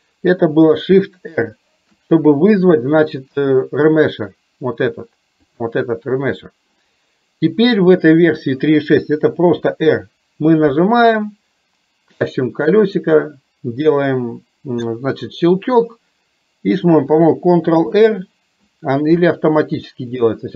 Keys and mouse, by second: 5.4-6.8 drag.